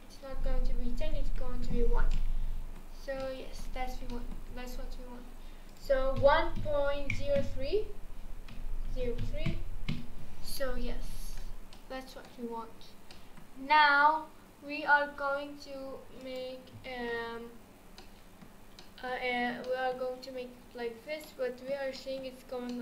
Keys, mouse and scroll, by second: 2.1-3.0 middle drag, 3.0 scroll up 1, 3.2-3.7 shift+middle drag, 3.7-4.1 scroll up 2, 4.1-5.7 shift+middle drag, 5.7-8.8 drag, 10.6-12.4 middle drag, 12.4-12.8 scroll down 2, 12.8 scroll up 2, 13.1-16.2 middle drag, 16.2-17.7 drag, 17.7 scroll down 4, 18.0-18.6 middle drag, 18.6 scroll up 2, 18.8-19.4 middle drag, 19.4 scroll up 1, 19.6-21.7 middle drag, 21.7 scroll down 2, 22.7-22.8 middle drag.